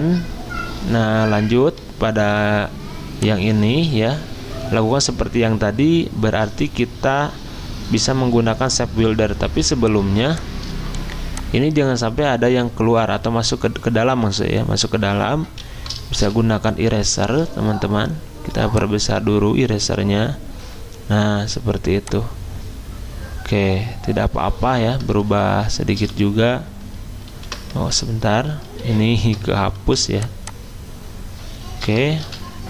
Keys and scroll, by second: 9.5 z, 11.0 v, 16.2 e, 17.9-18.5 ], 25.9 v, 27.3 ctrl+x, 28.3 ctrl+z, 28.8 ctrl+z, 29.8 v, 32.2 e.